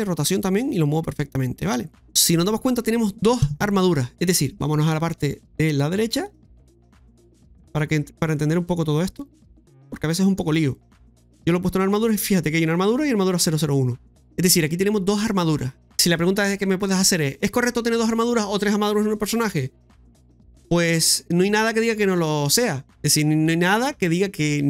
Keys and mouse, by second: 0.0-0.1 typing, 2.0-2.8 typing, 6.6 click, 9.4 click.